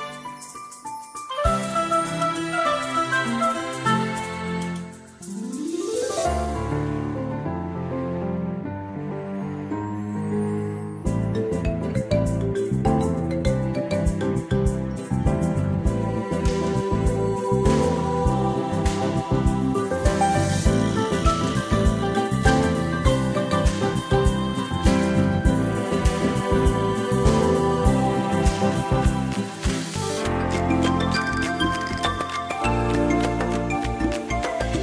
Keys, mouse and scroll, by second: 0.8 click, 1.3 scroll up 1, 2.9 click, 10.2 c, 13.2 click, 21.5 scroll down 1, 22.7 click, 23.1-23.4 ctrl+scroll down 1, 23.9 ctrl+scroll down 1, 30.5 click, 30.9 space, 32.6 click.